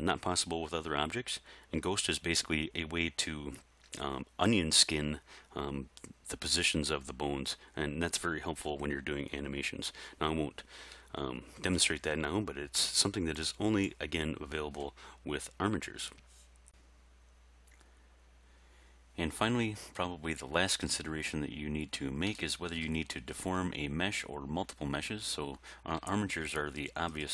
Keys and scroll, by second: 26.0 r.